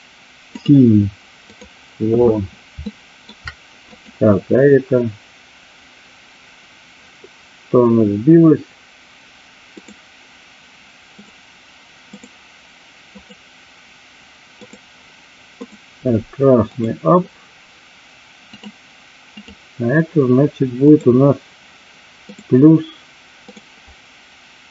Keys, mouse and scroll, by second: 2.8-3.3 shift+middle drag, 3.8 click, 11.0 click, 12.0 click, 14.7-15.7 drag, 18.6 click, 19.3 click, 20.8 click, 23.6-24.7 drag.